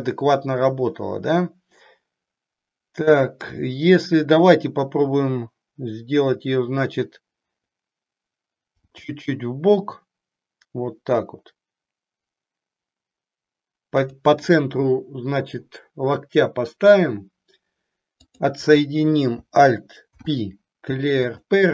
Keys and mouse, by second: 8.8 g, 14.0 click, 18.2 click, 20.0 alt+p.